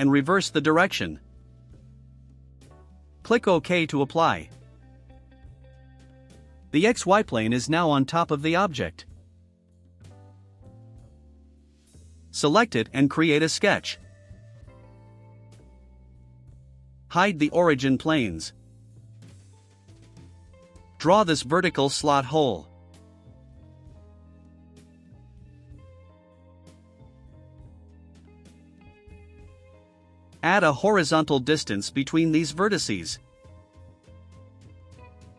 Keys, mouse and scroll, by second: 1.3 click, 4.8 click, 6.5 click, 6.9 space, 7.9 click, 8.2-11.2 drag, 12.3 click, 15.6 click, 17.4 click, 17.8 space, 18.7 middle click, 18.7 scroll, 19.1 middle click, 19.1 scroll, 23.9 click, 25.8 click, 28.1 click, 28.5 right click, 30.8 click, 31.6 ctrl+click, 34.1 click, 34.9 5.